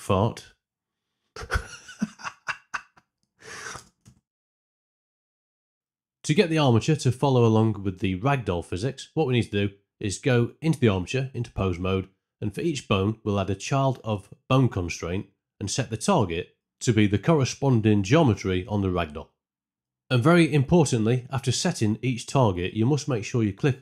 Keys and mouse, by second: 3.8 space, 4.1 shift+Left, 8.8 Tab, 9.5 click, 9.7 a, 10.0 ctrl+middle click, 10.9 click, 14.4 click, 16.0 z, 16.5 shift+click, 16.7 shift+click, 17.2 shift+click, 17.3 shift+click, 18.7 e, 19.3 click, 20.3-23.8 typing, 20.7 click, 21.1 click, 21.3 click, 23.7 click.